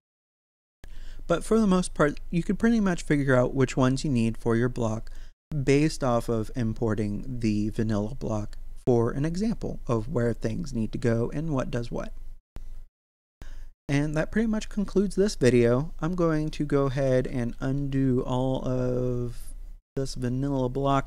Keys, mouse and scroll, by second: 5.1 click, 16.3 right click, 16.9 ctrl+z.